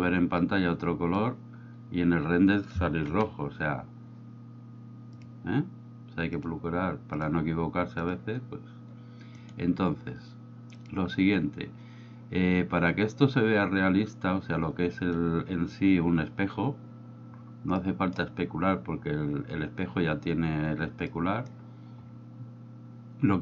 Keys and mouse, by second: 3.5 F12, 6.4 drag, 9.5 right click, 17.9 middle click, 21.2-21.6 middle drag.